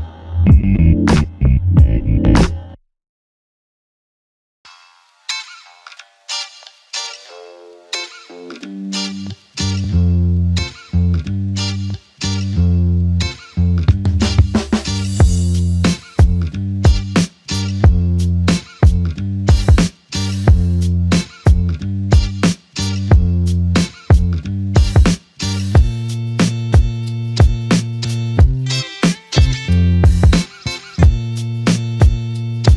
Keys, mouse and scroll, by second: 2.7 alt+click, 8.4 f, 10.9 alt+click, 14.2 shift+click, 16.5 alt+shift+click, 17.4 alt+click, 21.4 f, 23.0 alt+click, 26.5 ctrl+click, 28.1 r.